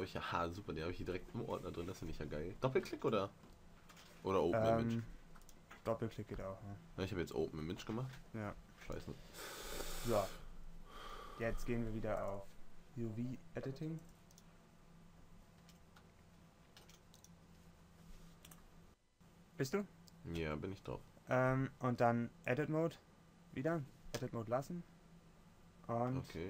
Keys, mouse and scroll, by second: 3.1 shift+c, 12.4-14.2 drag, 15.8 Tab, 17.0 Tab, 20.6 Tab.